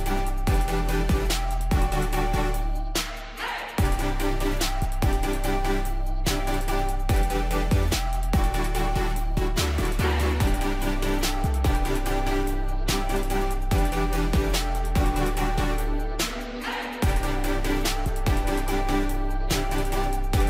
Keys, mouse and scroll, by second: 4.6 ctrl+click, 6.8 click, 10.5-15.4 drag.